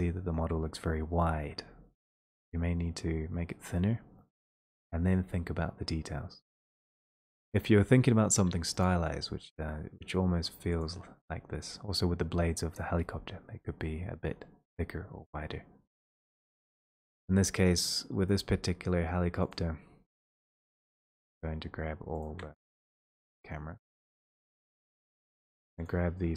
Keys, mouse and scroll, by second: 7.5 click, 11.8 click, 16.3 click, 17.3 click, 19.5 click, 20.5 click, 22.4 shift+click, 23.1 click, 25.9 click.